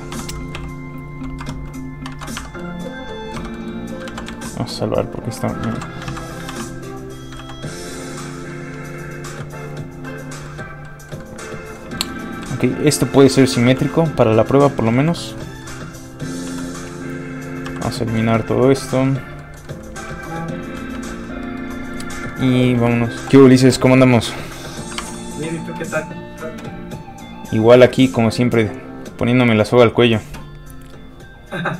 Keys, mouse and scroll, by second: 0.1 o, 0.6 g, 2.1 alt+a, 2.1 scroll up 1, 2.6 middle click, 3.4 Tab, 3.6 middle click, 4.1 ctrl+s, 4.4 shift+middle click, 5.7 ctrl+x, 6.5 ctrl+x, 6.5 ctrl+click, 7.4 ctrl+x, 7.7 middle click, 7.8 middle click, 9.5-10.0 scroll down 1, 10.1 middle click, 11.8 scroll up 2, 12.5 shift+middle click, 13.8 middle click, 15.1 l, 15.4 middle click, 15.6-16.1 scroll up 1, 17.7 x, 18.0 click, 18.3 shift+middle click, 18.8 middle click, 18.9 middle click, 20.1 shift+middle click, 20.8 ctrl+middle click, 21.0 ctrl+Tab, 21.5 shift+middle click, 22.3 middle click, 22.4 shift+middle click, 22.9 shift+n, 24.3 click, 25.0 alt+Tab, 26.2 alt+click, 27.4 click.